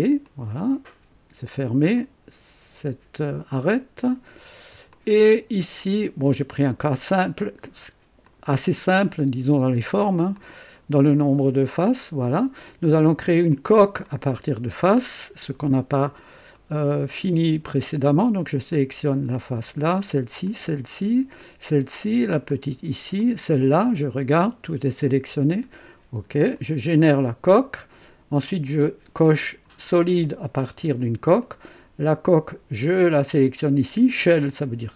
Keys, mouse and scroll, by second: 0.2 click, 1.9 click, 3.4 click, 4.3-4.7 scroll down 1, 4.9 click, 6.6 click, 8.2 click, 9.7 scroll down 1, 10.3-12.4 drag, 13.4 click, 14.0-14.7 right drag, 16.0 scroll up 1, 16.5-17.1 right drag, 18.6 click, 19.8 ctrl+click, 20.4 ctrl+click, 21.3 ctrl+click, 22.4 ctrl+click, 23.1 ctrl+click, 23.7-25.8 ctrl+drag, 26.5 click, 29.3 click, 31.3 click, 32.9 click.